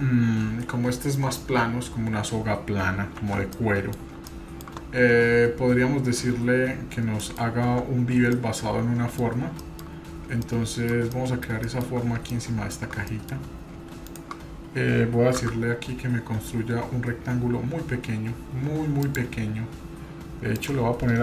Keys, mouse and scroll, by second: 0.8-1.6 scroll up 2, 1.6-2.1 scroll down 1, 2.9 scroll down 2, 3.2 shift+z, 3.5 middle click, 4.0 scroll down 1, 4.3 shift+middle click, 4.8 scroll up 2, 5.8-6.5 scroll down 3, 7.2 middle click, 7.2 scroll down 1, 7.7 Tab, 8.3-9.2 middle drag, 9.3-9.6 scroll down 2, 9.6-10.0 middle drag, 10.0-10.4 scroll up 2, 10.4-10.9 shift+middle drag, 11.1-11.5 middle drag, 11.6-12.0 shift+middle drag, 12.3-12.7 shift+middle drag, 13.1-13.4 middle drag, 13.4-13.8 scroll up 1, 14.1-15.0 shift+middle drag, 15.4 shift+a, 20.6-21.2 drag.